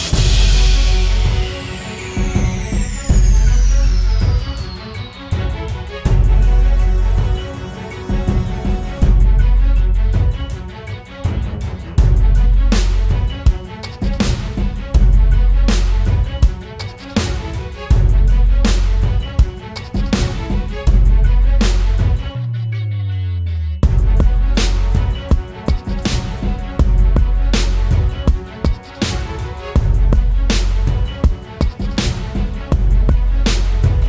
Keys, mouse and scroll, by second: 24.0 alt+click, 32.3 right click.